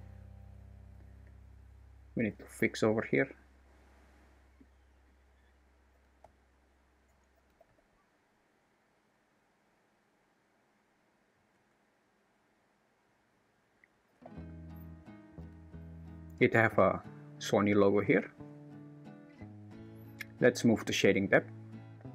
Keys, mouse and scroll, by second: 0.6 `, 1.3 `, 2.0 1, 2.5 alt+z, 4.7 click, 5.9 g, 7.3 g, 11.5 Tab, 14.1 n, 15.4 g.